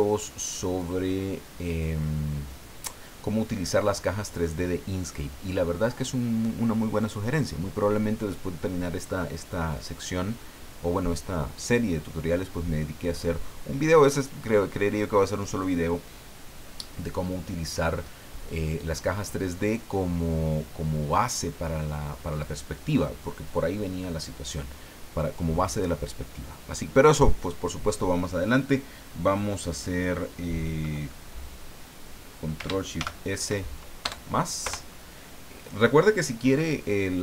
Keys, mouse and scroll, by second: 33.0 ctrl+shift+s, 34.0 KP_Add, 34.6 KP_Enter.